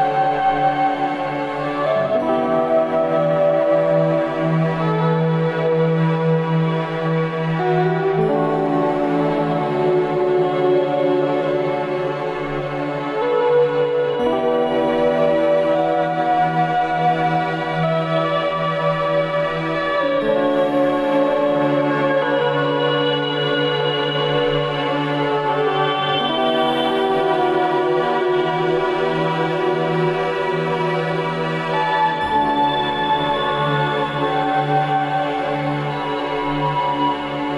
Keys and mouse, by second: 6.1 ctrl+b, 13.4 Tab, 14.9-15.6 middle drag, 16.9-18.5 drag, 19.2 click, 25.1-26.7 middle drag, 26.9 ctrl+s, 32.9 alt+h, 34.5 Tab, 35.2 Tab, 36.0-37.5 middle drag.